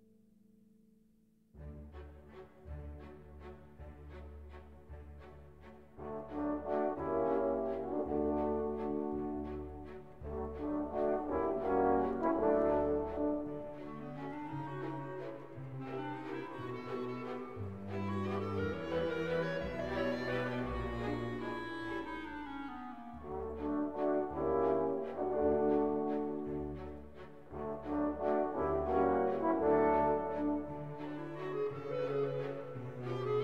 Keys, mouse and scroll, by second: 0.4 1, 0.9 0, 1.8 scroll up 2, 2.4 scroll down 2, 3.4 1, 3.8 2, 4.4 scroll down 2, 4.8-5.2 scroll up 2, 5.4 scroll down 2, 7.1 click, 8.1 click, 9.4 click, 10.7 click, 11.2 click, 11.8 click, 12.9 click, 13.9 click, 14.4 click, 15.3 5, 15.7 0, 17.9 click, 19.9-21.2 drag, 21.8-23.1 drag, 23.6-24.8 drag, 25.3 click, 26.2 click, 29.5 click, 30.4 click, 33.0 Escape.